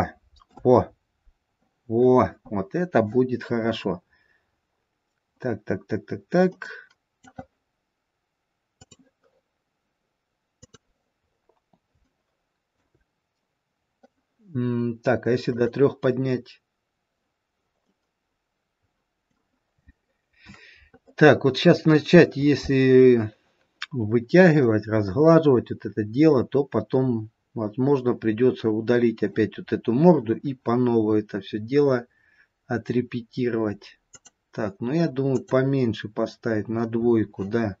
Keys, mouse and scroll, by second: 3.8-4.6 scroll up 2, 4.6-5.5 scroll down 1, 5.5-6.2 scroll down 1, 6.7 middle click, 6.7 scroll down 1, 11.2-12.1 scroll up 1, 12.1 scroll up 1, 12.2 shift+middle click, 15.4 click, 17.9 middle click, 25.2-28.2 scroll down 1, 28.2-31.3 scroll up 1, 34.0 click, 35.5 click.